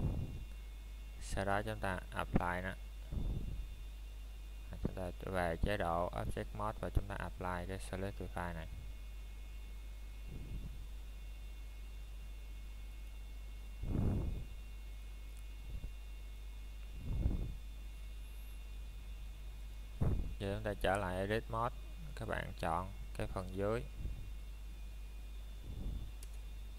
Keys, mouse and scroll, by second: 1.7-2.2 scroll up 1, 2.2 middle click, 5.0 middle click, 6.2 Tab, 7.3 click, 8.0 middle click, 15.0 click, 15.5 middle click, 15.9 scroll up 1, 16.4 middle click, 19.2 Tab, 21.0 click, 21.6 middle click, 22.4-22.8 scroll up 1, 23.3 alt+click.